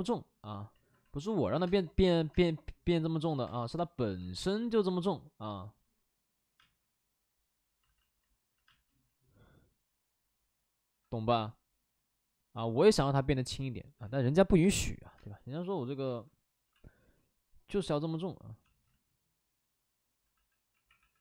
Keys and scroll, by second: 0.7 alt+s, 1.0 alt+s, 1.5 3, 1.6 space, 2.0 alt+s, 2.3 space, 3.4 space, 4.2 space, 6.5 space, 7.8 alt+s, 8.6 space, 10.8 c, 12.7 c, 13.9 c, 14.6 space, 15.1 space, 16.0 ctrl+z, 16.9 b, 16.9 p, 18.6 space, 18.8 ctrl+z, 20.3 c, 20.7 x, 20.9 c.